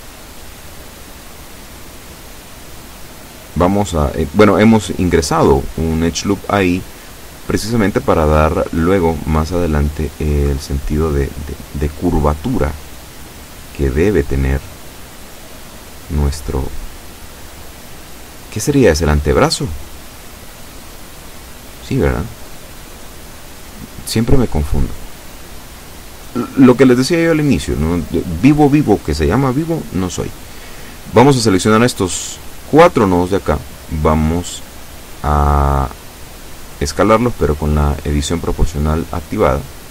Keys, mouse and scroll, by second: 0.1-1.1 shift+middle drag, 1.7-4.8 middle drag, 6.4-6.8 scroll up 2, 7.6 shift+right click, 8.3 shift+right click, 9.0 shift+middle click, 10.5 shift+right click, 11.1 shift+right click, 11.7 shift+right click, 12.3 shift+right click, 13.3-14.3 shift+right drag, 14.9 shift+right click, 15.3-18.9 shift+middle drag, 19.4 shift+right click, 20.1 shift+right click, 20.9 shift+right click, 21.4 shift+right click, 22.1 shift+right click, 22.6 shift+scroll down 1, 22.9-24.0 middle drag, 24.9 s, 26.0 x, 27.9 click, 28.4 middle click, 29.3 scroll up 2, 30.3 right click, 30.7 shift+right click, 31.7 shift+right click, 32.2 shift+right click, 33.2 s, 34.3 z, 36.0 Escape, 36.9 o, 38.5-39.5 typing.